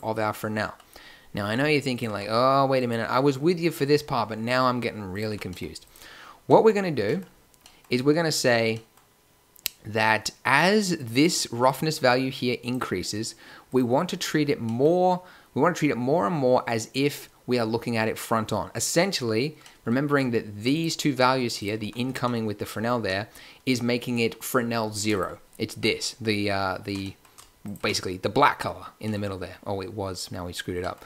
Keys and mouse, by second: 1.9-2.7 drag, 2.0 g, 5.2 g, 11.7-13.3 drag, 21.7 g.